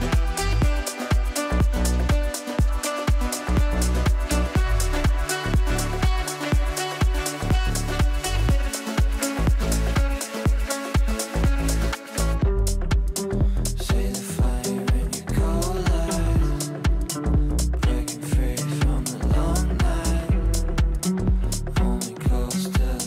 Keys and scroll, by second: 10.1 c, 11.2 c, 11.6 e, 20.4 ctrl+r.